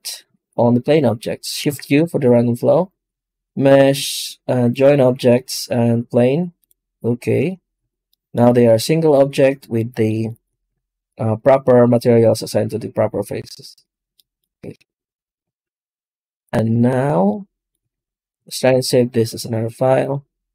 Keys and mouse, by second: 0.2 shift+c, 8.0 middle click, 8.2 Tab, 8.6 middle click, 10.2 shift+middle click, 10.6 z, 17.8 ctrl+space.